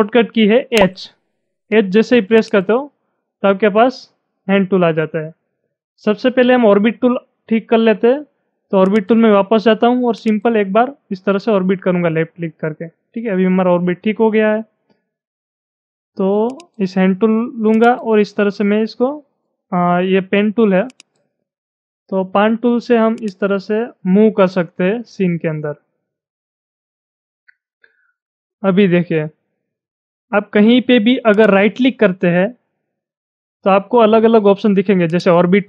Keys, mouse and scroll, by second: 0.7 h, 2.4-8.1 drag, 8.8 click, 10.2-15.2 drag, 16.5 click, 17.9-19.5 drag, 19.5-19.9 scroll up 3, 20.9-28.7 drag, 31.5 right click, 35.1 click.